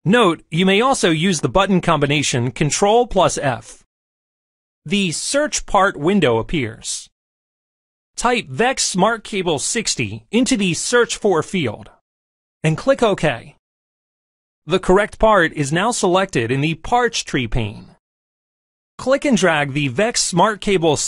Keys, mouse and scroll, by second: 3.8 middle click, 4.7 click, 8.4 click, 16.5-18.4 middle drag.